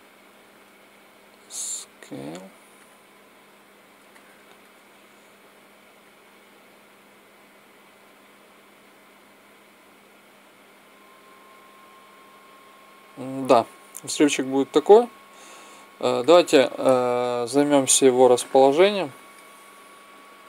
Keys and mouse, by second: 0.8 s, 3.9 middle click, 4.3 middle click, 5.8-7.8 drag, 17.7-19.6 drag.